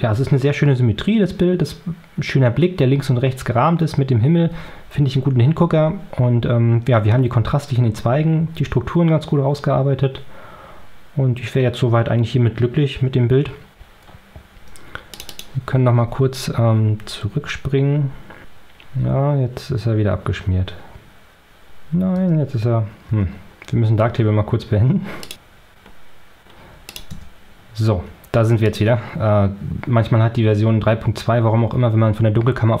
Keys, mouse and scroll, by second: 15.0 click, 18.4 ctrl+scroll up 2, 26.4 Caps_Lock, 26.6 middle click, 26.8 scroll down 4, 27.2 middle click, 27.4 middle click, 27.5 Tab, 28.3 click.